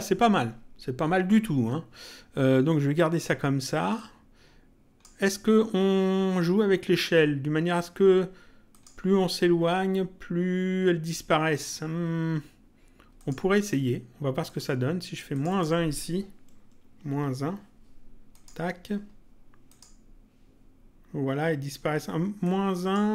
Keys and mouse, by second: 3.9 click, 8.6 click, 13.1 click, 14.5 click, 18.3 click, 19.7 click, 22.4 click.